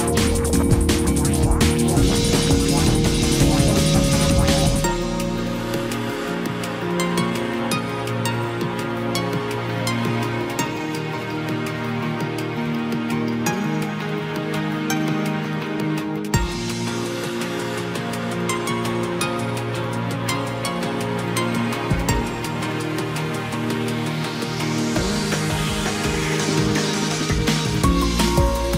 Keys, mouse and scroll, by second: 1.5 ctrl+=, 20.7 ctrl+-.